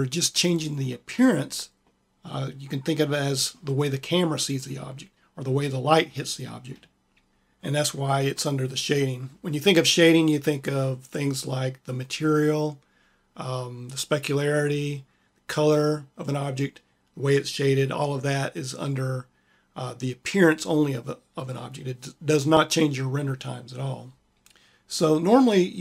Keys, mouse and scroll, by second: 0.7-1.8 drag.